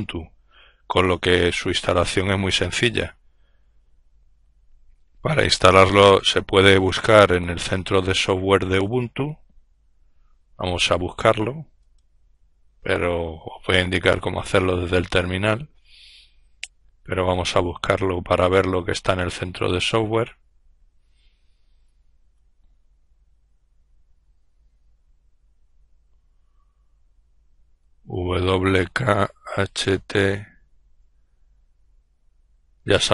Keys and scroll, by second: 27.1-28.2 typing, 29.4 typing.